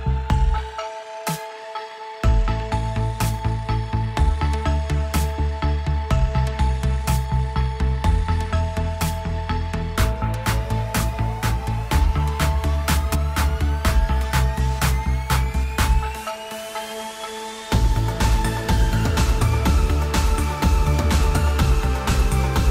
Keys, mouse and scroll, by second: 1.3 g, 10.3 click, 11.2 click, 11.6 click, 12.9 click, 13.6 click, 14.8-15.7 drag, 19.9-20.2 shift+drag.